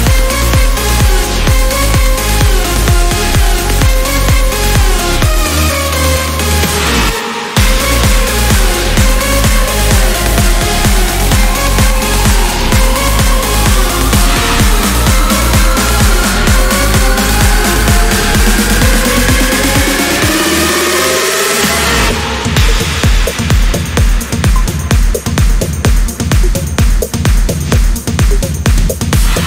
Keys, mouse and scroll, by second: 1.0-2.3 drag, 3.0 click, 4.4 click, 5.8 Delete, 7.3 ctrl+y, 8.2 click, 9.8 click, 10.5 click, 11.4 click, 12.6 click, 14.0 click, 15.0 click, 15.8 click, 17.1 Delete, 21.4 click, 22.2 Delete, 23.6 click, 24.7 click, 26.2-27.5 drag.